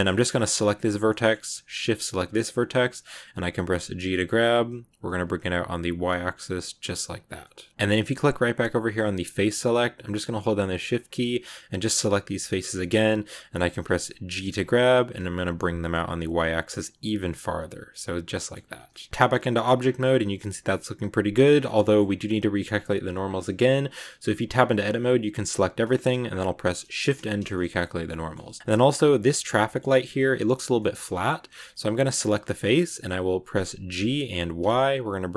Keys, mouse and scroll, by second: 0.5 right click, 1.0-2.1 middle drag, 2.1 shift+right click, 2.3 scroll down 1, 2.4-3.9 middle drag, 3.9 g, 7.2 scroll down 2, 7.3-9.1 middle drag, 9.1 click, 10.2 right click, 11.0 shift+right click, 11.7 shift+right click, 12.3 shift+right click, 12.6 scroll down 1, 12.7-13.7 middle drag, 13.7-14.3 scroll up 1, 14.3 g, 17.8 middle click, 18.5 scroll down 2, 18.6 Tab, 18.8 middle click, 19.4-19.9 scroll down 3, 19.5 Tab, 19.9-21.4 middle drag, 21.4-23.3 scroll up 3, 21.6 middle click, 23.3 Tab, 24.5 a, 26.9 shift+n, 27.4-28.5 shift+middle drag, 28.5 scroll up 1, 28.6-32.0 middle drag, 32.0 right click, 32.2-33.9 middle drag, 33.9 g.